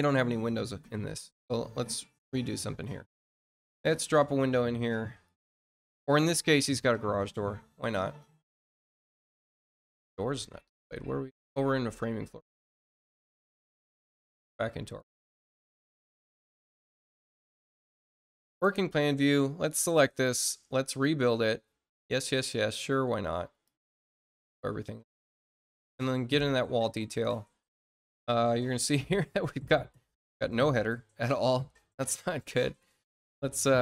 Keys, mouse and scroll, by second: 1.7 scroll up 2, 2.1 middle click, 2.6 scroll down 2, 5.2 click, 6.6 click, 7.9 click, 11.3 click, 12.7 scroll up 2, 13.5 click, 14.7 click, 16.4 click, 17.4 middle click, 17.8 middle click, 18.7 click, 20.8 click, 22.3 click, 23.6 click, 25.7 click, 27.3 middle click, 27.8 middle click, 30.0 middle click, 32.2 click.